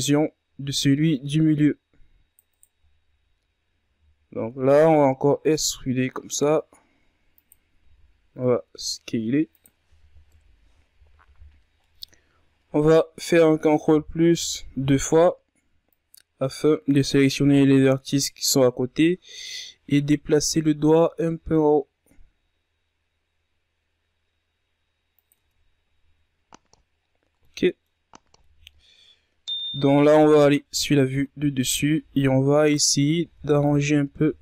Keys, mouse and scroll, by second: 0.5 c, 3.9 scroll down 4, 4.2 z, 4.5-5.6 ctrl+scroll up 4, 6.1 e, 8.9 s, 11.4 KP_1, 12.3-12.9 scroll down 1, 12.9-14.3 middle drag, 14.3 ctrl+KP_Add, 15.3 ctrl+KP_Add, 17.0-18.8 drag, 18.8 KP_3, 19.8 KP_1, 21.3 g, 26.4 Tab, 26.7-28.0 scroll down 10, 28.0-28.5 scroll up 5, 28.5-29.7 middle drag, 29.7-30.3 scroll up 1, 30.6 KP_7, 31.4-32.2 shift+scroll up 6, 32.2 Tab, 32.7-33.1 ctrl+scroll up 4, 33.1 z, 33.8 right click.